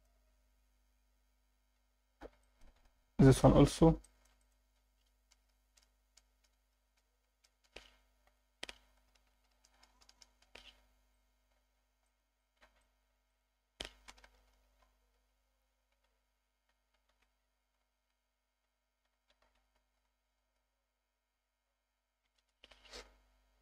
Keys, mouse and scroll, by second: 0.1 Tab, 0.3-0.7 scroll down 3, 1.5 scroll down 2, 2.4 alt+shift+middle click, 2.8 scroll up 2, 3.3 click, 3.5 Tab, 4.0 alt+shift+middle click, 4.4 click, 5.3-6.4 ctrl+KP_Add, 7.1 ctrl+KP_Add, 8.3 click, 9.0 ctrl+KP_Add, 11.1 alt+middle click, 11.7 scroll down 2, 12.0 alt+shift+middle click, 12.4 alt+shift+middle click, 12.8 ctrl+alt+middle click, 13.3 click, 14.1-14.8 ctrl+KP_Add, 15.9 ctrl+KP_Subtract, 16.7 s, 17.1 shift+z, 17.8 ., 18.0 0, 18.6 Escape, 19.0-20.6 typing, 22.3 1, 22.4 Return, 22.7 Tab, 23.3 scroll down 1.